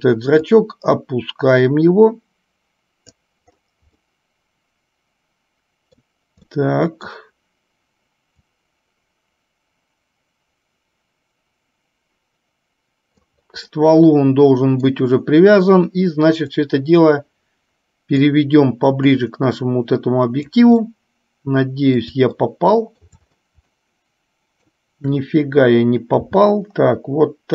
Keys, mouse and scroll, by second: 0.7-3.2 drag, 4.4-6.2 middle drag, 6.7 middle click, 8.7-13.4 drag, 14.0-15.1 middle drag, 17.0-18.6 drag, 19.5-20.7 drag, 21.2-22.2 middle drag, 22.9 shift+middle click, 24.0-25.1 middle drag, 26.4 g.